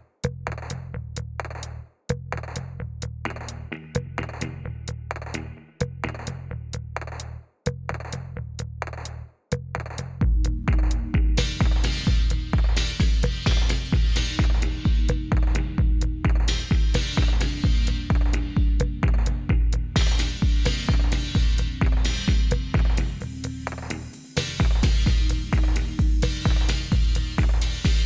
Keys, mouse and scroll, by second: 1.0 click, 1.6 click, 4.0 click, 6.0 click, 7.2 click, 8.4 click, 9.8 click, 10.9 click, 12.3 click, 15.4 click, 15.7 click, 16.3 click, 16.7 click, 19.7 click, 19.9-21.9 scroll, 21.9 click, 21.9-22.3 scroll, 22.8 click, 22.9 s, 23.7 click, 24.0-24.3 scroll, 24.9-25.3 scroll, 25.6 click, 25.8 middle click, 26.3 click, 26.3 middle click, 27.2 click, 27.6 click.